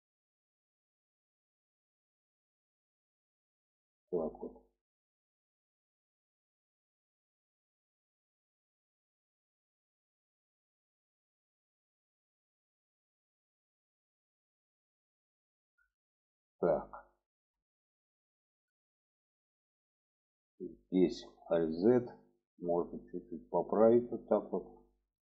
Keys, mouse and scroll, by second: 0.0 middle click, 1.4-1.7 shift+middle drag, 2.8-6.8 drag, 8.3 click, 9.3 click, 10.3 shift+middle click, 13.7-15.4 middle drag, 16.1 shift+middle click, 16.9 shift+middle click, 17.8 shift+middle click, 18.5 shift+middle click, 19.3 shift+middle click, 21.1 alt+z, 21.7 click, 22.9-24.3 drag, 24.7 shift+middle click.